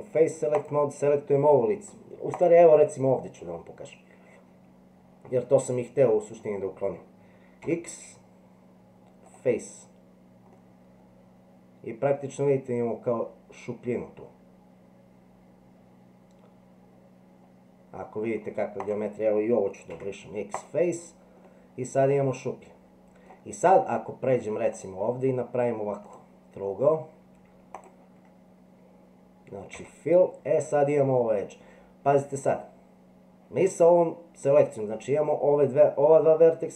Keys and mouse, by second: 0.5 click, 2.4 click, 5.6 middle click, 7.6 x, 10.5-18.3 middle drag, 19.9 x, 21.4-23.2 middle drag, 24.7 click, 27.7 shift+click, 29.7 f.